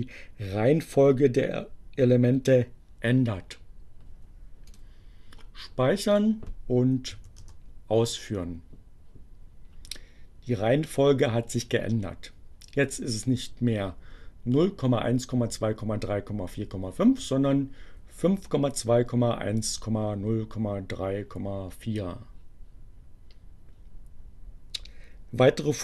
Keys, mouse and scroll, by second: 4.6 click, 6.1 click, 6.7 Up, 7.5 Return.